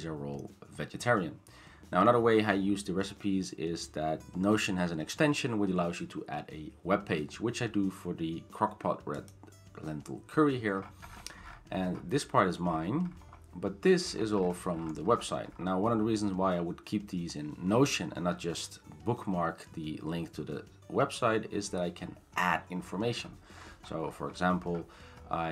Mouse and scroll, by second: 9.3 click, 10.8-11.9 scroll, 12.7-14.1 scroll, 14.1-14.8 scroll, 14.8 scroll down 10, 15.1 scroll, 15.2-15.6 scroll down 7, 16.2-18.2 scroll, 21.2-21.6 scroll, 21.6-22.9 scroll up 8, 22.9 scroll down 10, 23.2 scroll, 23.3-25.5 scroll down 20.